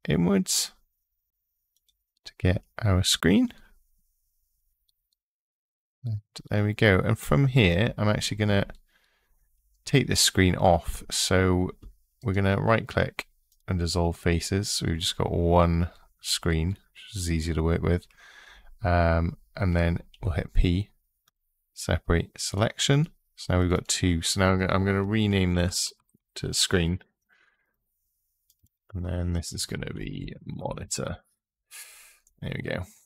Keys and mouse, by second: 1.5 click, 3.3-4.3 middle drag, 19.9 p, 22.7 click, 23.4 click, 24.4-27.4 shift+drag, 26.2 e, 28.2 click, 28.4-30.9 drag.